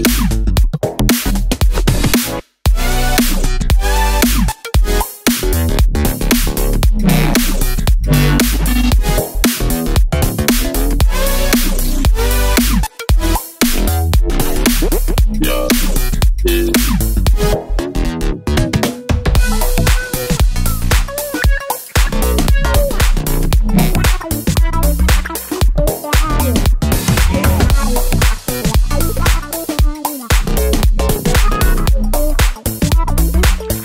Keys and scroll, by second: 1.1 super+d, 6.7 Page_Up, 7.2 Left, 7.5 Page_Up, 7.7 Right, 8.5 Left, 8.6 Left, 8.8 Left, 9.0 Page_Down, 9.1 Page_Down, 9.3 Down, 18.3 Down, 18.3 Down, 18.5 Down, 18.6 Down, 19.0 Left, 19.1 Left, 19.3 Left, 19.3 Down, 19.4 Down, 19.5 Down, 19.9 Left, 20.0 Left, 20.1 Left, 20.1 Left, 20.2 Left, 20.3 Down, 20.4 Down, 26.3 Down, 26.4 Right.